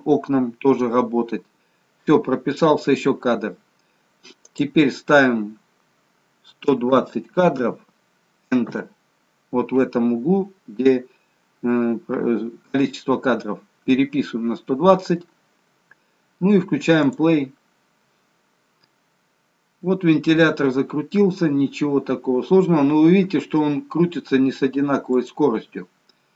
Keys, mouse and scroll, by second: 4.4 click, 17.0 click.